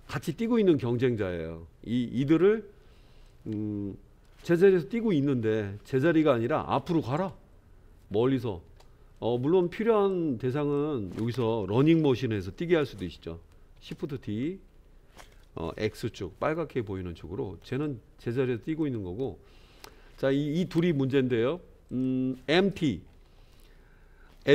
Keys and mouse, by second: 3.2-4.2 middle drag, 6.4 click, 7.1 space, 8.7 space, 9.2-9.6 middle drag, 10.0-10.8 drag, 13.8 shift+d, 18.7 click, 19.3 middle click, 21.9 click.